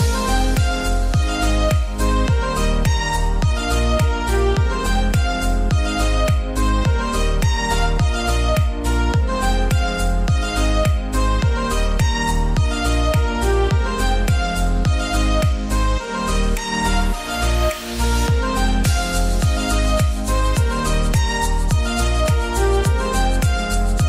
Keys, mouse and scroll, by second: 0.5-1.1 scroll down 1, 1.1 click, 1.2-4.7 drag, 4.8 click, 8.6-14.9 drag, 15.0 click, 19.3 click, 21.6 click.